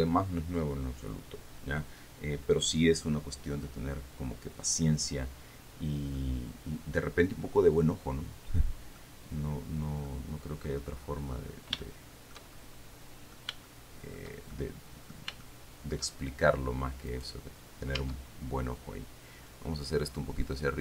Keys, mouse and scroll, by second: 6.4-9.4 middle drag, 10.3 middle click, 11.9 scroll up 2, 12.5 shift+right click, 13.0 shift+middle click, 13.9-15.6 shift+middle drag, 15.7 shift+middle click, 17.5 right click, 18.4 Tab.